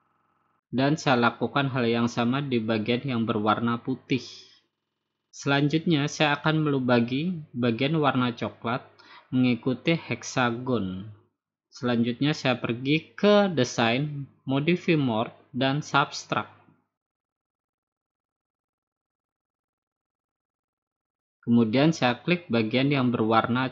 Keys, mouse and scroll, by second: 0.4 click, 1.6 click, 2.2 click, 2.7 right click, 4.3 click, 5.8 click, 7.2 click, 9.1 click, 11.3 shift+click, 14.2 click, 19.5 click, 20.5 click.